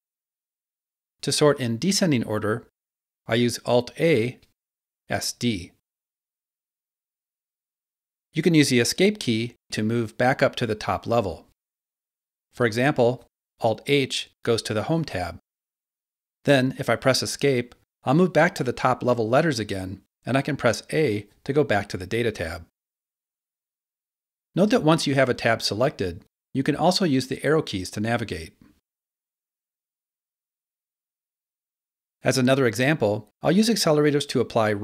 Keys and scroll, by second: 4.1 alt+a, 5.4-6.1 typing, 9.3 Escape, 14.7 alt+h, 17.1 Escape, 20.7 a, 26.1 Left, 29.0 Right.